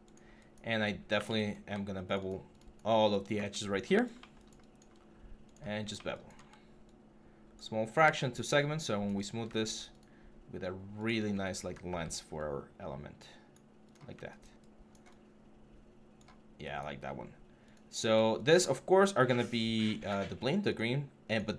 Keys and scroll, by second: 0.9 q, 8.4 3, 11.7 w.